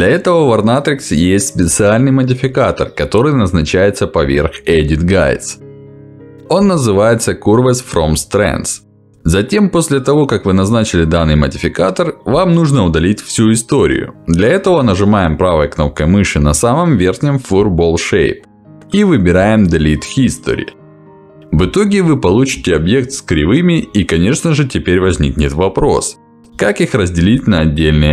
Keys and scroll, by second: 4.3 Escape.